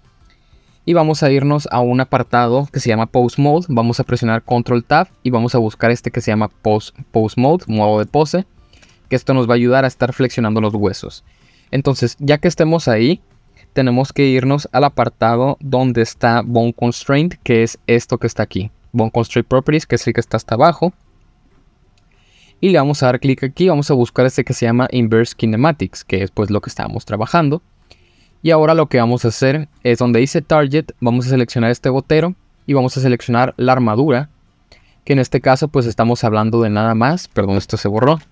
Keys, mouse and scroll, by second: 4.5 ctrl+Tab, 7.2-7.7 middle drag, 8.1-8.8 shift+middle drag, 21.4 click, 23.1-26.8 drag, 28.1-29.1 middle drag, 29.4-29.8 middle drag, 31.8 click, 38.1 ctrl+z.